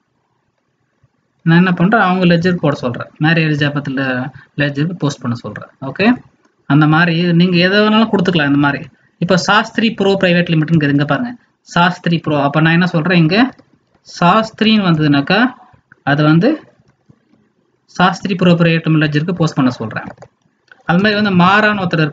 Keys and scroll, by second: 6.0 alt+Tab, 12.1 alt+Tab.